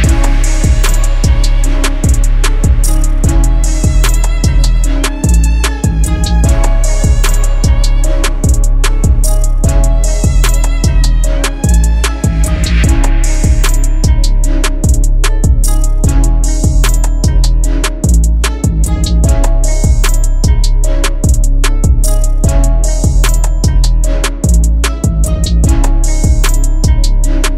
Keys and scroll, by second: 7.7 F3, 10.3 shift+F2, 12.0 Delete, 15.4 ctrl+q, 18.9 space, 23.8 F3.